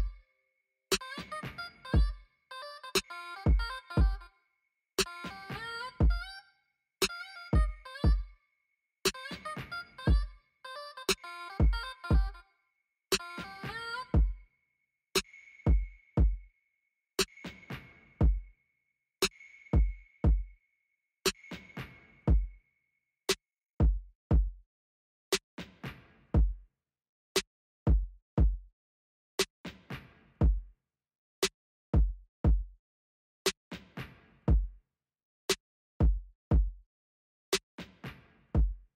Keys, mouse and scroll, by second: 33.9 middle click.